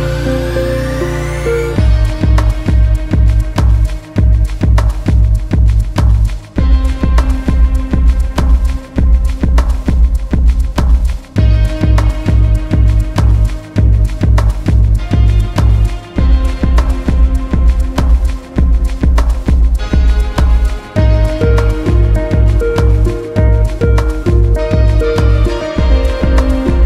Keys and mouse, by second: 1.4-2.9 drag, 3.3 KP_0, 13.0-13.6 drag, 13.9-15.1 drag, 15.8 middle click, 16.7 click, 17.5 click, 18.2 shift+a.